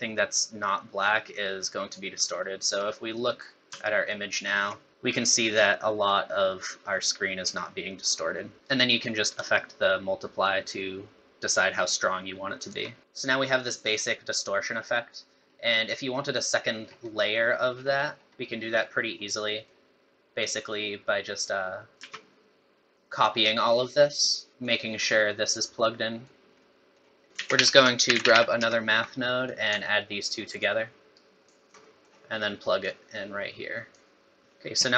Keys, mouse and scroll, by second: 2.1 scroll down 2, 2.4 middle click, 2.8 scroll down 1, 3.1 middle click, 4.3 ctrl+shift+click, 7.4 scroll up 3, 8.2-8.5 scroll down 2, 9.4 shift+click, 14.6-15.0 scroll down 4, 15.2-15.6 scroll up 5, 16.0 scroll down 1, 16.8-18.4 scroll down 8, 17.2 middle click, 18.5 middle click, 19.1 scroll down 2, 19.3 middle click, 20.4 click, 22.0 shift+d, 23.8 scroll up 3, 24.0 middle click, 24.5 scroll up 1, 24.6 click, 26.6 middle click, 27.3 shift+a, 30.2 alt+right click, 31.1 alt+right click, 31.8 middle click, 32.8 click, 34.4 middle click, 34.4 scroll up 10, 34.4 space.